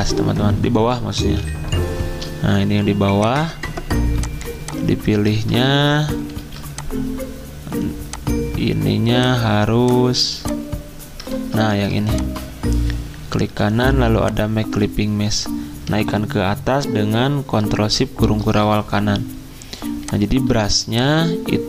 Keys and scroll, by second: 5.3 shift+z, 6.4 2, 11.3 ctrl+z.